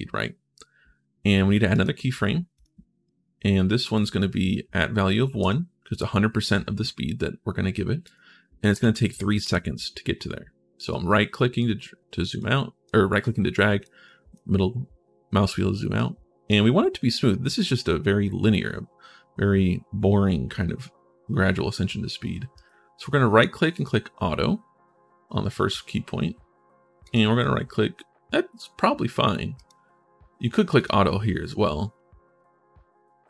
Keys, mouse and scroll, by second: 1.5 right click, 2.3 click, 3.7 click, 5.2 1, 7.8 right click, 8.5 3, 10.7 right click, 11.5-12.0 scroll up 1, 12.2 right click, 13.0 right click, 13.8 right click, 14.5-14.8 scroll down 1, 15.7 right click, 22.3 right click, 23.5 click, 26.8 click, 26.8 right click, 29.3 right click, 30.5 click.